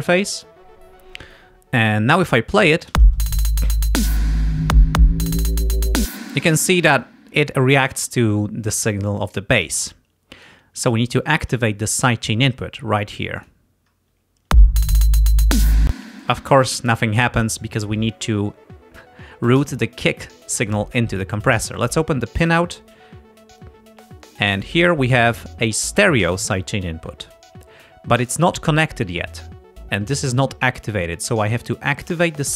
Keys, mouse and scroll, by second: 3.0 space, 6.0 space, 13.4 click, 14.5 space, 15.9 space, 22.6 click, 23.7-24.9 drag.